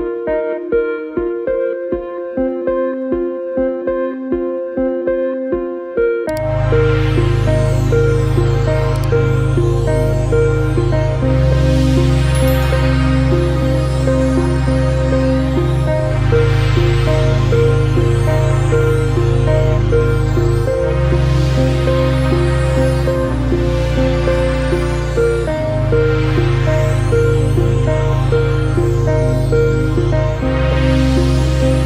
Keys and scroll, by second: 1.1 ctrl+alt+z, 25.5 ctrl+z, 27.1 ctrl+z.